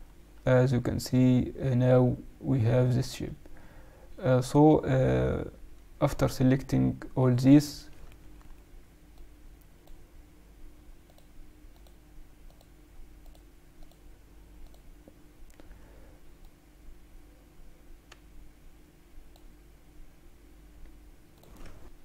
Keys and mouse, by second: 0.2-1.5 middle drag, 6.2-8.0 right drag, 9.1-18.2 drag, 10.8 middle click, 16.3 middle click, 17.9 middle click, 21.3 click.